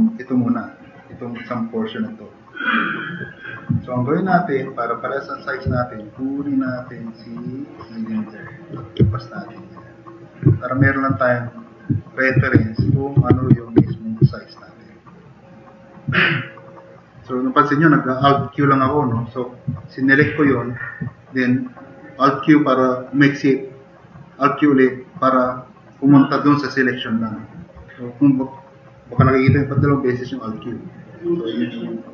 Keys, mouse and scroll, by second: 12.6 alt+q, 13.3 alt+q, 13.8 s, 14.3-14.7 drag, 14.7 click, 15.1-16.6 drag.